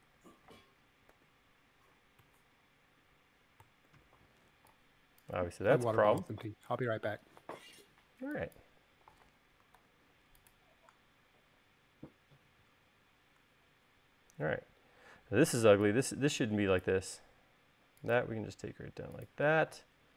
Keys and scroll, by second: 0.6 super+z, 1.9 u, 4.5 u, 10.4 super+z, 17.9 l.